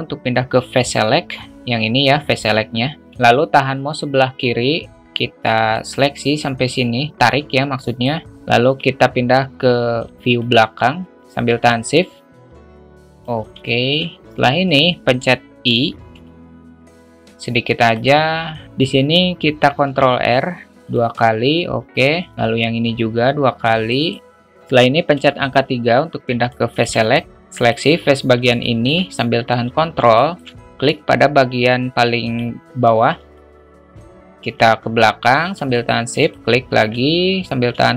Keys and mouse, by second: 5.7-8.0 drag, 11.7-13.2 shift+drag, 13.6 alt+shift+middle drag, 18.7 ctrl+z, 19.8 ctrl+r, 22.3 ctrl+r, 25.1 3, 26.4 alt+shift+middle click, 27.6 click, 28.6 alt+shift+middle drag, 30.1 alt+shift+middle click, 32.2 ctrl+click, 33.3-34.4 alt+middle drag, 35.7 shift+click, 36.3-36.7 alt+shift+middle drag, 37.8-37.9 alt+shift+middle drag.